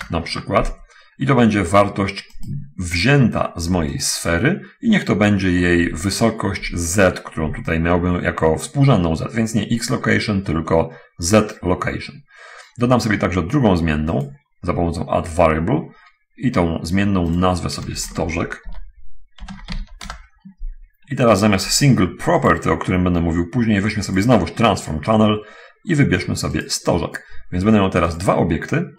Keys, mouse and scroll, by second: 0.0-0.1 typing, 0.4 Return, 2.6 click, 4.4 click, 10.3 click, 11.9 click, 14.2 middle click, 16.0-16.6 scroll down 1, 17.6 click, 18.4 shift+s, 18.6 t, 19.9 z, 20.1 e, 20.2 Return, 20.2 k, 22.8 click, 24.5 click, 25.3 scroll down 1, 27.0 click, 28.5 click.